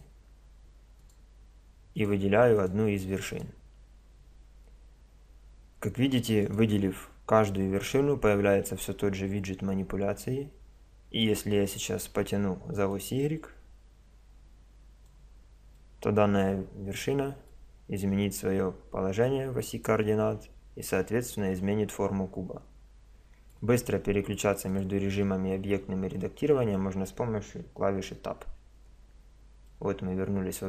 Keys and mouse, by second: 6.4-9.2 right drag, 12.9-14.5 drag, 14.5-15.5 middle drag, 15.8 middle click, 15.9 click, 17.6-19.6 middle drag, 24.0 middle click, 26.2 click, 28.4 Tab, 29.7-30.6 drag.